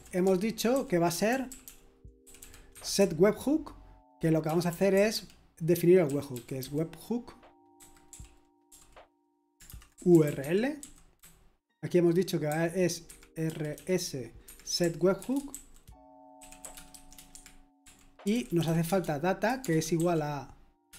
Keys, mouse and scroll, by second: 0.0-20.9 typing.